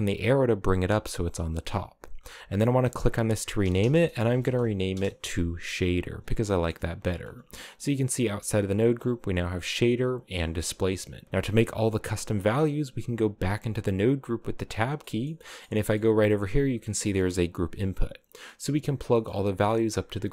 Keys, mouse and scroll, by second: 2.4-5.4 drag, 6.0 scroll down 2, 6.1-7.8 middle drag, 7.8 Tab, 8.2-10.1 scroll up 11, 10.1-10.9 scroll down 1, 10.9 middle click, 11.2 click, 11.9 click, 13.1 Tab, 14.0 click, 14.5 scroll down 6, 14.7 middle click, 15.6-16.4 scroll up 3, 16.4 click, 16.7 middle click, 17.0-17.9 drag.